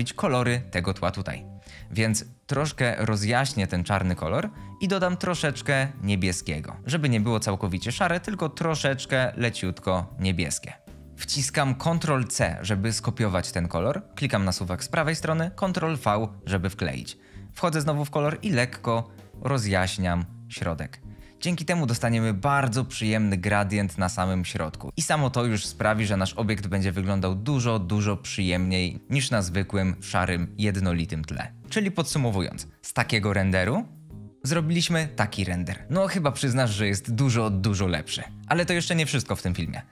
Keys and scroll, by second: 12.1 ctrl+c, 15.7 ctrl+v.